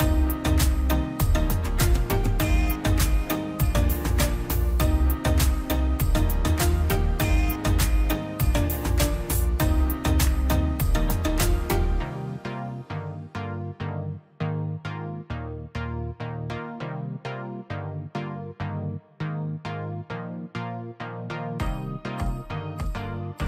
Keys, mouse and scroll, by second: 0.3 click, 0.8 scroll down 1, 2.3 click, 4.5 space, 5.5-6.0 scroll up 1, 6.0-7.5 drag, 9.9 middle click, 10.9 scroll up 1, 11.5 scroll down 1, 12.3 click, 12.6 scroll up 1, 13.1 scroll down 1, 13.3 scroll up 1, 13.8 click, 14.2 scroll down 1, 15.0 middle click, 15.4 scroll up 1, 16.7 click, 17.5 scroll down 1, 17.7 space, 18.0 e, 18.3 click, 18.6 scroll down 1, 18.9 middle click, 19.2 scroll down 1, 19.9 middle click, 20.3 scroll down 1, 20.8 scroll up 1, 21.9 click, 22.7 middle click.